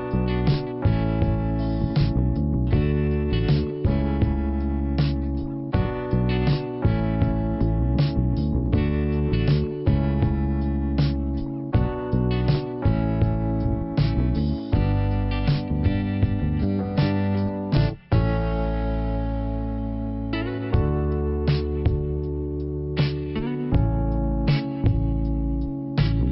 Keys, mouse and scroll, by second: 5.2 p, 6.1 scroll down 1, 9.1 click, 9.9 click, 10.8 click, 11.9 click, 13.5 click, 15.4 click, 16.5 click, 16.5 click, 18.0 click, 19.6 m, 20.7-21.5 typing, 22.4 click, 24.4 click, 25.8 click.